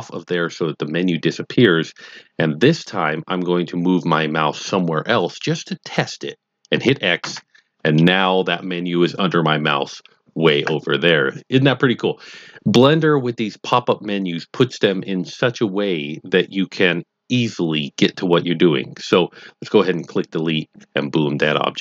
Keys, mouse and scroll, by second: 7.2 x, 19.9 click.